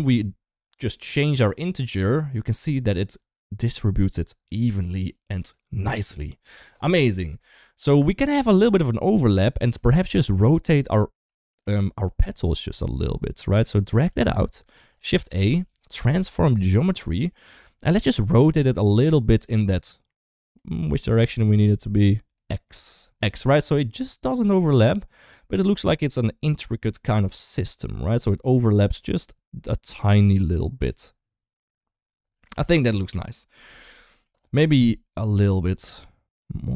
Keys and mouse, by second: 0.7-6.5 shift+drag, 6.9-7.2 middle drag, 8.6 middle click, 9.4 middle click, 10.0 shift+middle click, 11.3 shift+middle click, 13.3 shift+middle click, 13.9 click, 15.0 shift+a, 17.4 click, 19.3-20.8 shift+drag, 21.2 ctrl+z, 21.6-25.5 shift+drag, 25.9-33.1 middle drag, 33.6 shift+middle click, 33.9 middle drag, 34.7-36.7 middle drag.